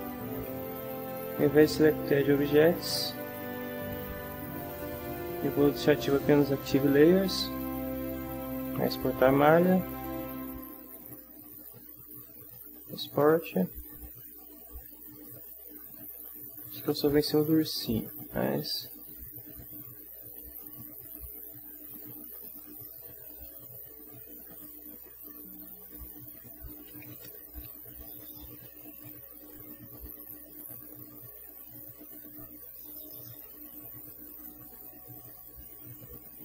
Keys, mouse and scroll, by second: 2.3 click, 13.4 click, 22.4 click, 23.3 click, 24.6 click, 25.9 click, 26.7-30.0 typing, 31.9 click, 32.6 click, 34.1 alt+Tab.